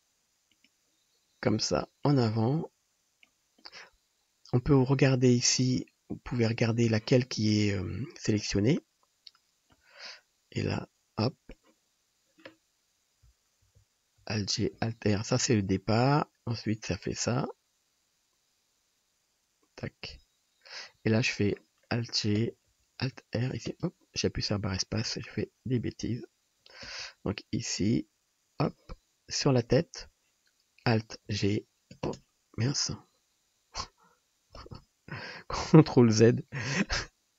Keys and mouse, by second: 13.7 alt+g, 14.2 alt+r, 22.5 space, 22.7 g, 25.2-29.6 ctrl+middle drag, 25.7 ctrl+z, 27.0 space, 29.6-37.3 drag, 30.9 space, 31.3 g, 34.7 space, 36.4 ctrl+z.